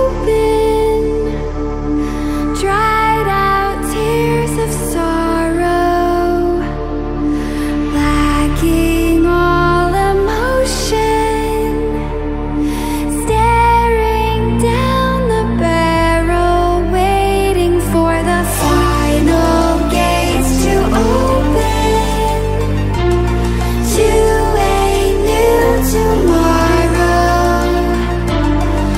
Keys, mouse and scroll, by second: 0.6-1.6 drag, 1.8-2.2 ctrl+scroll down 2, 2.9-3.9 drag, 4.7 alt+scroll up 1, 5.5 click, 5.5 click, 6.5 click, 7.0 ctrl+scroll up 1, 8.6 drag, 9.8 scroll down 1, 10.5 ctrl+scroll up 1, 12.0 drag, 13.1 scroll down 1, 13.8 ctrl+scroll down 1, 14.7 click, 15.7 click, 16.1 ctrl+scroll down 1, 17.9 click, 18.3 alt+scroll up 2, 19.1 alt+scroll up 1, 19.7 scroll up 1, 20.1 scroll down 1, 20.9 drag, 22.7 alt+scroll up 1, 23.0 scroll down 2, 23.9 alt+scroll down 1, 24.4 scroll up 1, 24.6-25.1 scroll down 2, 26.1 alt+scroll down 1, 27.3 click, 27.6 scroll up 1, 28.3 alt+scroll down 1.